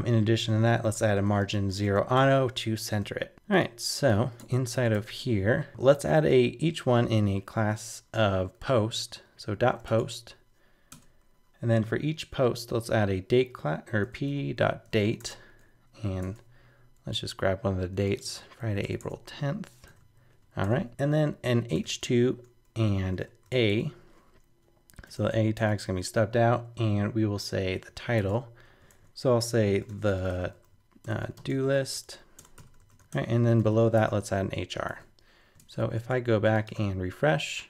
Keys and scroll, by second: 3.0 super+s, 16.2 super+Tab, 18.3 super+a, 18.6 super+c, 18.8 super+Return, 19.0 super+Tab, 19.9 super+v, 20.6 super+Return, 28.2 super+Tab, 29.0 super+z, 33.1 super+Return, 34.6 super+s, 34.9 super+Tab, 36.7 super+r.